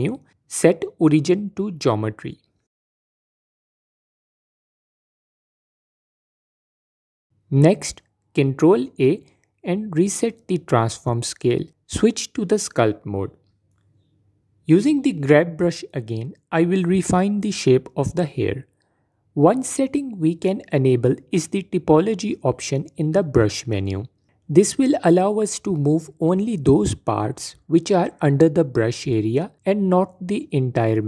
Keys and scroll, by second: 7.3 Tab, 7.8 ctrl+a, 10.9 Tab.